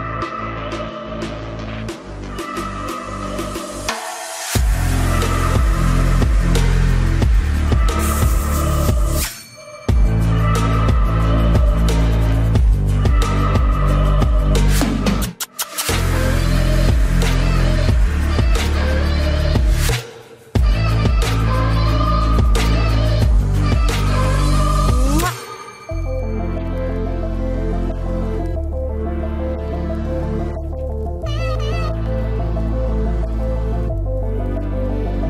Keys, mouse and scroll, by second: 0.7 r, 1.8 KP_Decimal, 2.2 e, 3.2 click, 3.8 r, 5.7 e, 8.4 r, 9.2 e, 10.2 r, 11.5 e, 12.7 r, 13.7 e, 14.6 r, 15.7 e, 17.9 r, 19.4-20.4 drag, 20.4 f, 20.8 middle click, 22.7 f, 24.4 Tab, 24.7 z, 26.8 z, 27.5 z, 28.3-30.2 drag, 30.2 middle click, 30.8 KP_3, 31.1 z, 31.7 a, 35.0 a.